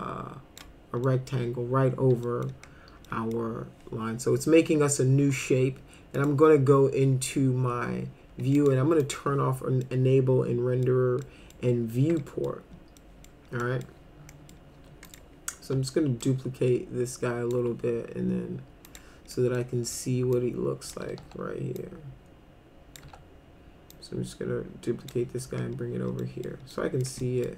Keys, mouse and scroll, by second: 1.0 middle click, 2.3 middle click, 3.1 middle drag, 6.2 click, 8.6 click, 9.0 click, 9.8-10.9 middle drag, 11.2 middle click, 12.2 middle click, 13.0 middle click, 13.6 middle click, 14.3 middle click, 14.8 w, 15.1 click, 16.2-17.5 shift+drag, 18.9 click, 19.3 middle click, 20.4 click, 21.2 e, 21.8-23.0 drag, 23.0 w, 23.9-25.1 drag, 26.2 middle click, 26.7 middle click, 27.2 middle click.